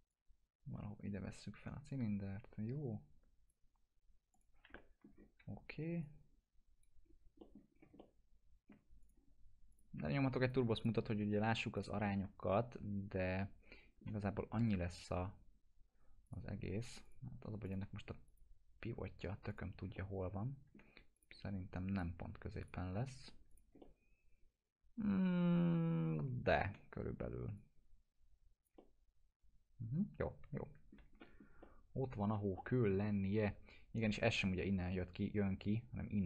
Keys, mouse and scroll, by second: 0.1-3.5 drag, 4.7 alt+middle click, 5.1 scroll down 1, 5.4 w, 6.0-6.9 click, 7.0 scroll up 1, 7.4 middle click, 7.7 scroll up 1, 8.0-8.9 alt+middle click, 9.0 click, 12.0-14.2 alt+middle drag, 16.2 click, 19.9-20.9 alt+middle click, 21.1 click, 23.8-26.9 alt+middle drag, 27.6-30.9 click, 28.8-31.2 alt+middle drag, 31.2 middle click, 31.6-32.5 alt+middle click, 32.5-33.2 middle drag.